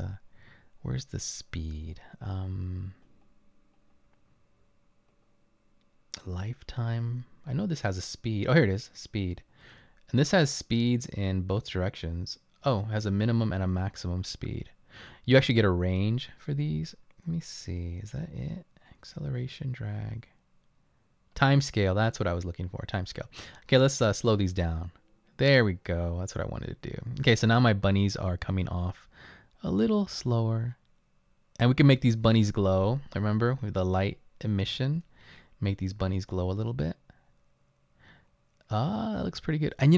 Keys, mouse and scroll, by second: 28.2 click, 28.8 right click, 33.2-34.4 scroll up 2.